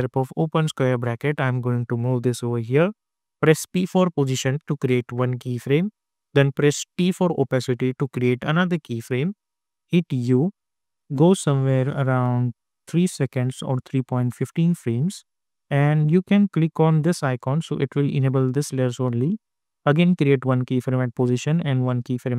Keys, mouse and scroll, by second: 0.9 [, 3.3-4.1 typing, 4.8 click, 6.8 t, 8.2 click, 9.8 u, 11.7-16.9 drag, 20.3 click.